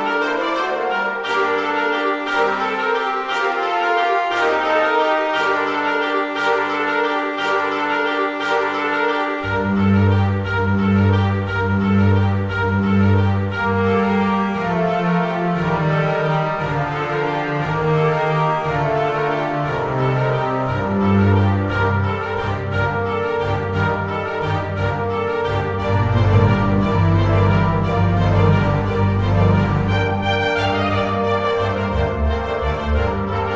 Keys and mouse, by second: 0.8 click, 2.1 middle click, 3.1 shift+middle click.